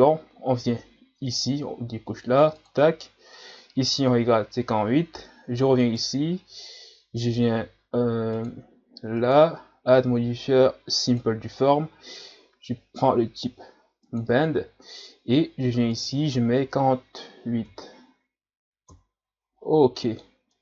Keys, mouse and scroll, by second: 1.3-5.6 drag, 5.8 right click, 8.3-12.2 drag, 14.0 click, 16.0-18.9 drag, 20.1-20.6 middle drag.